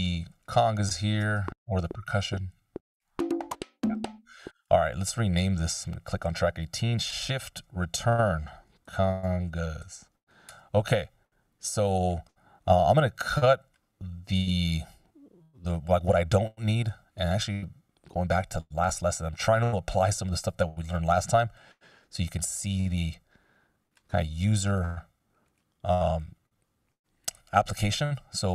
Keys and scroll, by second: 1.6 space, 4.2 space, 8.8 shift+c, 9.5 shift+g, 10.6 Return, 16.8 F16.